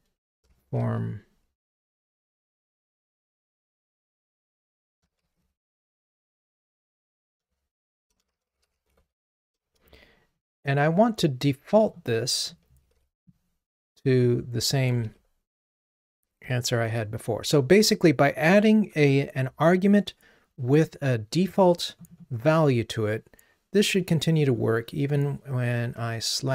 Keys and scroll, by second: 13.0 super+c, 15.0 super+v.